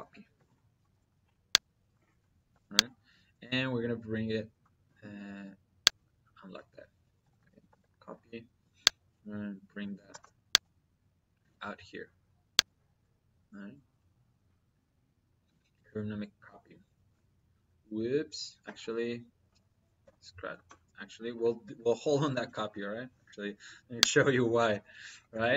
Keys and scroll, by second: 0.0 y, 0.2 space, 2.3 space, 4.1 Escape, 6.9 c, 7.3 p, 7.5 y, 7.6 space, 9.9 space, 12.7 Escape, 22.1 ctrl+z.